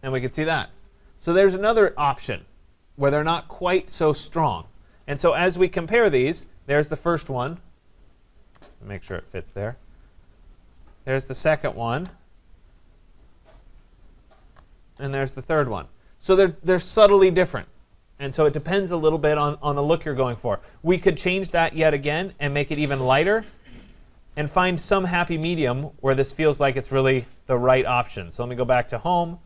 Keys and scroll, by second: 8.9 ctrl+c.